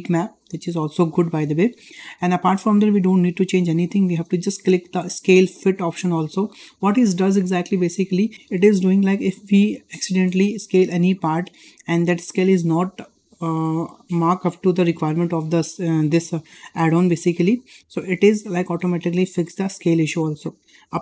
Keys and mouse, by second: 6.0 click.